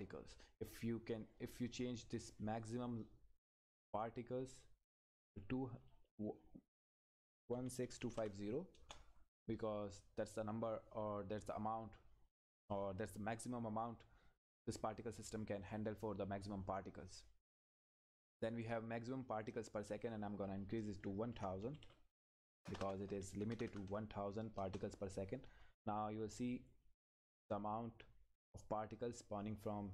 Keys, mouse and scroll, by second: 1.4 click, 8.7 Return, 19.6 click, 24.6 Return.